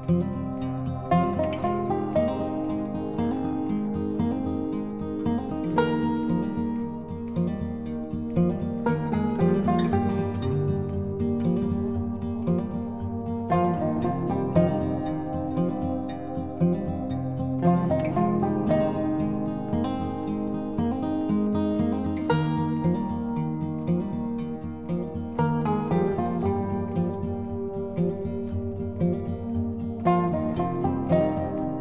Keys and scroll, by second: 26.1 ctrl+z, 31.3 ctrl+0.